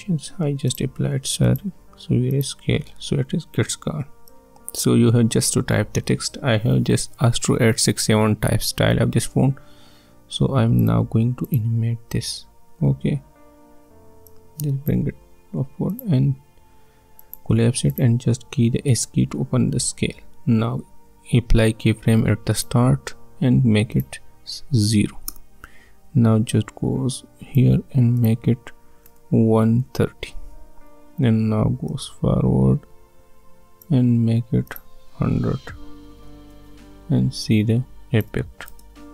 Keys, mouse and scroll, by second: 14.3-15.9 drag, 18.9 s, 22.5 click, 24.9 typing, 25.3 Return, 26.5-28.2 drag, 29.0-30.2 typing, 31.9-34.7 drag, 35.4-36.7 typing, 37.4 click, 38.6 space.